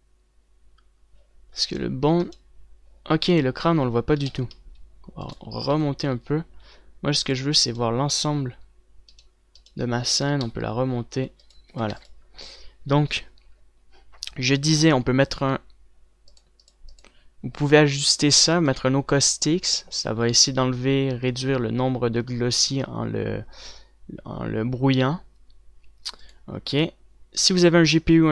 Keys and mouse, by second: 4.9 g, 6.1 g, 8.1-11.0 drag, 11.0 g, 12.2 click, 12.5 a, 12.6 ctrl+s, 16.7-28.3 drag.